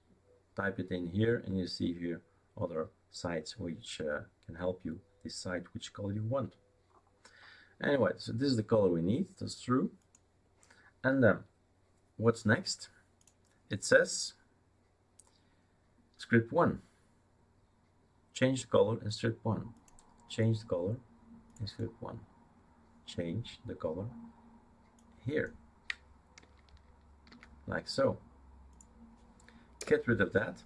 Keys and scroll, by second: 27.3 ctrl+v, 29.8 BackSpace.